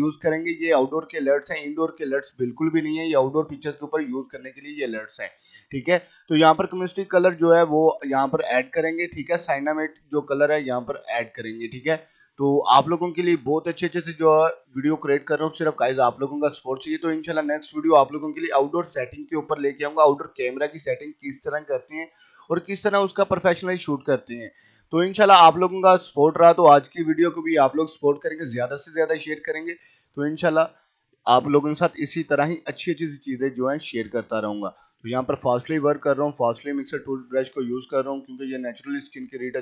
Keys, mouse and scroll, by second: 0.0-1.8 typing, 0.9 click, 2.1-3.5 drag, 3.5 ], 3.8 click, 4.6-5.2 scroll down 2, 4.7-8.8 typing, 6.0 click, 7.2 click, 8.2 click, 9.1-10.8 drag, 10.8-11.3 typing, 11.3-13.0 drag, 13.0 scroll up 1, 13.2 ], 13.4 click, 15.0 ], 15.3 click, 16.5 [, 16.7-18.6 drag, 18.6-18.9 scroll down 1, 18.9 typing, 19.1 click, 20.2 ], 20.5 click, 21.0 ], 21.5 click, 21.9 scroll up 1, 22.4 typing, 22.7 click, 23.5 click, 24.0 ], 24.3 click, 25.5 [, 25.7 click, 26.5 [, 26.7 click, 27.7 ], 27.8 click, 28.7 typing, 29.1-30.9 drag, 31.0 ], 31.6 click, 32.1 ], 32.4-33.8 drag, 34.0 click, 34.7 [, 35.0 click, 35.6 ], 35.7 click, 35.9 ], 36.0 scroll down 1, 36.2 [, 36.5 click, 37.2-37.6 scroll down 1, 37.6 ], 37.8 click, 38.8 ], 38.8 click.